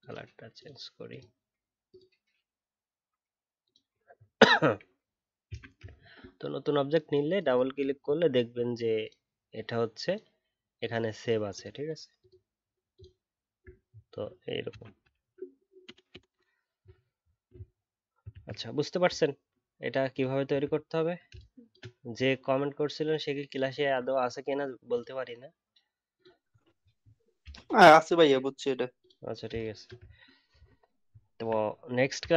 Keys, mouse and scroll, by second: 4.1 alt+scroll down 1, 5.9-8.9 alt+scroll up 4, 13.6 alt+scroll down 1, 13.8 alt+scroll up 1, 15.1 alt+scroll down 3, 17.1-17.4 alt+scroll down 1, 17.4-18.3 alt+scroll up 1, 19.2 alt+scroll up 1, 20.7 alt+scroll down 1, 26.5 alt+scroll down 2, 26.7 alt+scroll up 1, 30.1 alt+scroll down 4, 30.2 alt+scroll up 1.